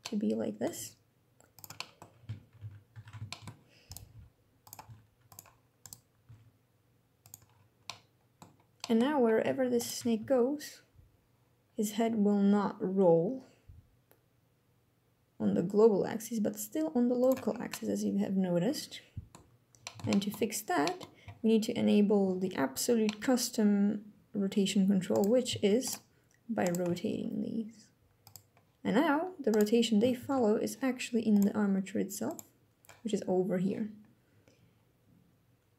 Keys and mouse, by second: 0.4 g, 1.2 middle click, 1.4-1.7 middle drag, 2.3 KP_1, 2.6 KP_3, 3.0 shift+middle click, 3.8 g, 4.5 r, 5.0 click, 5.9 g, 6.9 click, 7.5-8.1 drag, 8.4-8.8 drag, 9.8 g, 16.9 click, 17.4-19.1 drag, 19.8 shift+middle drag, 20.5 middle click, 22.8 middle click, 25.6 shift+middle drag, 26.7 r, 27.9 click, 28.3-29.3 middle drag, 29.3 click, 29.9 ctrl+Tab, 31.0 click, 31.9 click.